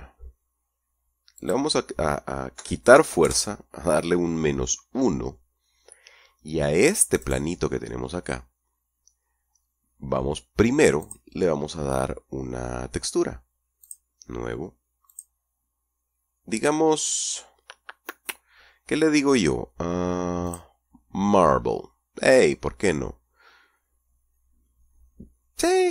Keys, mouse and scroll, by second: 1.6 click, 2.8 KP_Subtract, 3.1 KP_1, 3.4 KP_Enter, 7.4 right click, 11.2 click, 14.0 click, 15.3 click, 20.7 click.